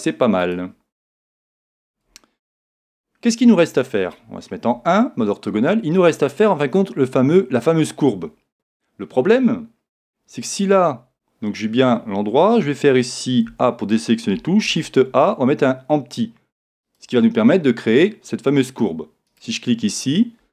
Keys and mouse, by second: 0.4 click, 2.1-4.7 middle drag, 4.7 KP_1, 13.5 a, 14.7 shift+a, 19.6 right click.